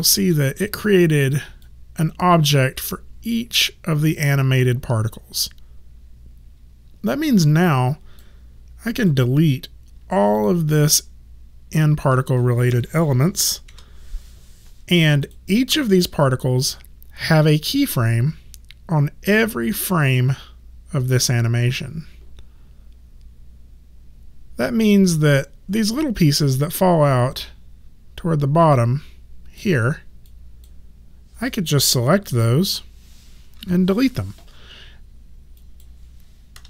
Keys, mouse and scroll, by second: 1.6 click, 9.0 click, 10.3 shift+click, 13.6 Delete, 15.2 click, 17.4 click, 30.3 click, 32.3 shift+click, 33.6 Delete, 35.5 click, 36.5 KP_0.